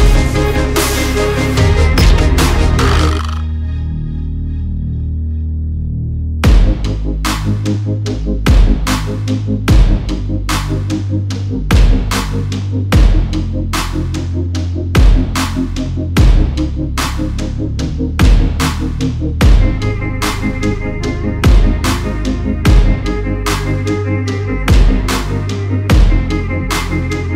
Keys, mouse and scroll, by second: 0.0 click, 0.9 click, 1.2 scroll, 2.2 click, 2.7 click, 3.7 click, 4.3 click, 5.3 click, 6.3 click, 6.7 click, 7.3 click, 7.8 click, 8.5 click, 8.9 click, 9.4 click, 10.2 click, 11.0-11.5 scroll, 12.9 click, 14.1 click, 15.4-16.4 typing, 15.9-16.5 scroll, 18.0 Tab, 18.3-19.0 typing, 21.0 Tab, 21.3 Tab, 21.4-25.1 typing, 26.5-27.3 typing.